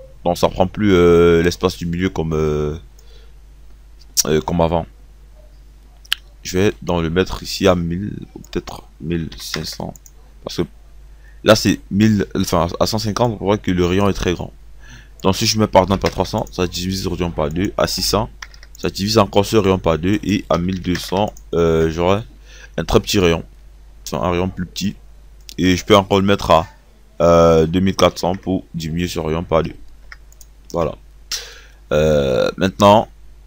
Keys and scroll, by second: 9.0 KP_1, 9.3 KP_5, 15.8 KP_3, 16.1 KP_0, 17.0 KP_0, 17.7 KP_6, 20.4 KP_2, 20.9 KP_0, 27.3 KP_2.